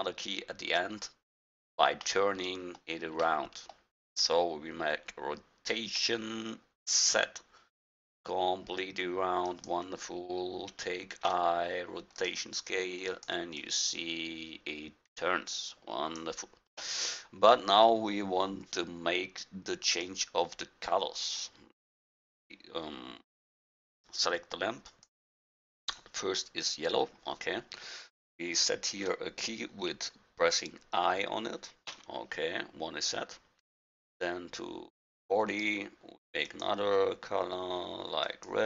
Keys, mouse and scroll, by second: 2.2 middle click, 6.0 r, 11.3 i, 13.2-15.3 drag, 19.9-24.0 drag, 24.9-27.1 drag, 31.9 i, 34.0-38.6 drag.